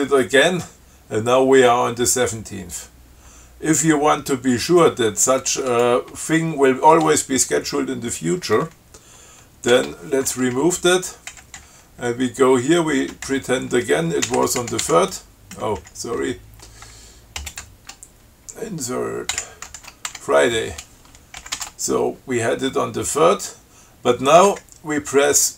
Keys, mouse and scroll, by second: 4.9-6.3 drag, 10.0 ctrl+w, 11.0 Delete, 11.6 Up, 11.8 Right, 14.2-15.1 typing, 16.0 Left, 16.4 Right, 17.6 space, 19.6 Insert, 19.8-20.8 typing, 21.6 ctrl+x, 21.8 ctrl+s, 24.8 Right.